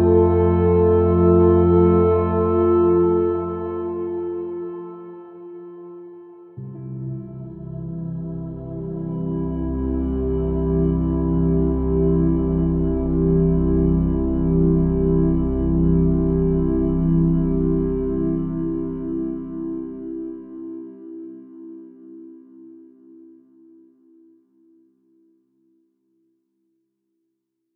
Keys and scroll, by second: 18.7 f, 19.5 super+0, 20.4 super++.